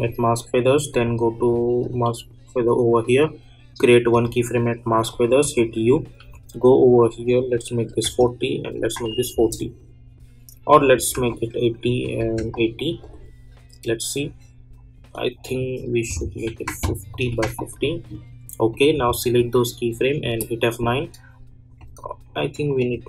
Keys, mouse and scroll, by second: 4.1 click, 5.4-6.6 typing, 7.3 click, 9.3 Return, 10.7 click, 15.4-20.2 drag, 20.2 F9, 21.7 click.